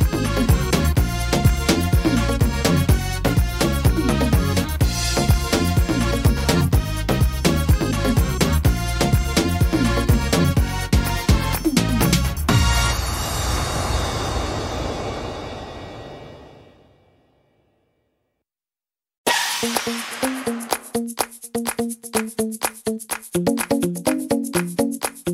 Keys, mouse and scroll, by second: 2.3-2.8 scroll up 4, 2.6 middle click, 4.8 e, 8.4 click, 9.3 middle click, 10.8 click, 12.6 middle click, 13.0 right click, 13.6 shift+right click, 14.5 right click, 15.6 e, 16.8 middle click, 18.4 s, 20.8 middle click, 22.5 ctrl+r, 23.6 right click, 24.9 click.